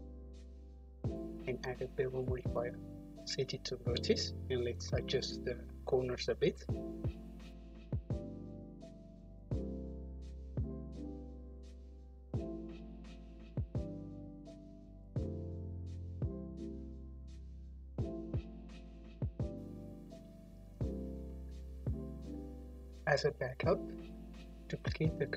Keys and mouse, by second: 0.5 middle click, 0.6-1.7 right drag, 1.7-4.3 middle drag, 4.3-6.2 right drag, 6.2-14.2 middle drag, 14.2-17.1 right drag, 17.1 middle click, 17.2-19.1 right drag, 18.7 shift+d, 19.1-21.2 drag, 21.3 m, 24.7 Return.